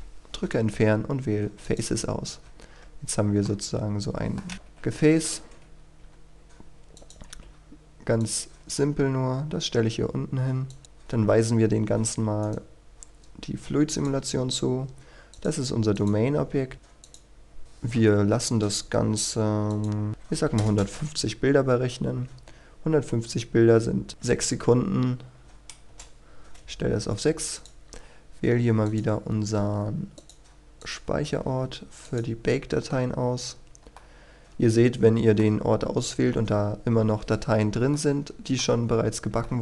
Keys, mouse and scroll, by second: 1.6 click, 2.4 Tab, 2.7-3.3 scroll down 1, 3.3 scroll up 1, 3.4 middle click, 4.5 KP_1, 5.6-5.9 scroll down 1, 6.9 click, 10.6 click, 10.8-12.4 scroll up 1, 12.4 right click, 13.9 click, 20.1 KP_1, 20.8 Return, 22.2-24.1 scroll down 1, 24.1 click, 25.4 KP_6, 25.9 Return, 27.5-33.1 drag, 33.3-34.0 scroll up 1, 34.0-36.1 middle drag, 37.9 shift+middle click, 38.8 scroll up 1, 39.5 shift+middle click.